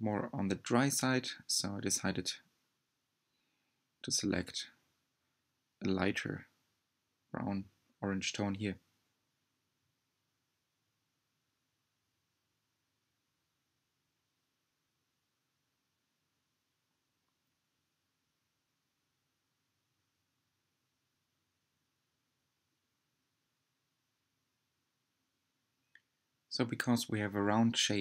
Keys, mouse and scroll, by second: 1.2-5.0 drag, 9.8-20.2 shift+middle drag, 20.2-28.0 drag.